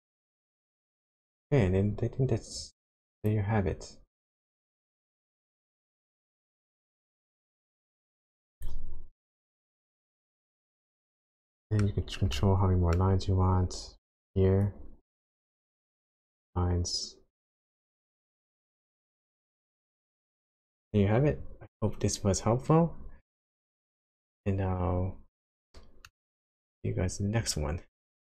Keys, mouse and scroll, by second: 0.6 middle click, 1.5 scroll up 1, 2.8 click, 4.2 click, 8.6 click, 8.9-10.1 scroll down 8, 10.1 shift+middle click, 11.4 shift+middle click, 12.4 shift+middle click, 13.4-14.0 scroll up 5, 14.6 click, 18.8 middle click, 20.4 middle click, 20.6 middle click, 20.6 scroll down 3, 25.4-25.8 scroll down 2, 26.0 middle click, 26.8-27.6 scroll up 1.